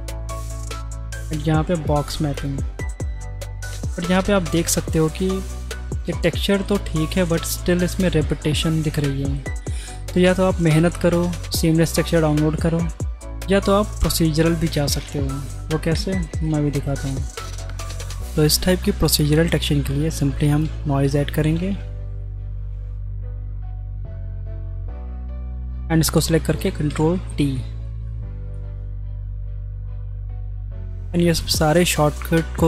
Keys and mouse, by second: 1.4-2.4 drag, 3.1-3.6 drag, 3.6-4.2 middle drag, 4.2 click, 4.5-6.0 middle drag, 8.9-9.3 shift+drag, 14.7-15.8 drag, 16.0 Delete, 16.5 click, 16.9 shift+a, 19.8 click, 20.4 shift+a, 24.8 click, 26.5 ctrl+t, 27.5 click, 28.8-29.2 drag, 29.4 click, 30.0 drag, 31.1 click.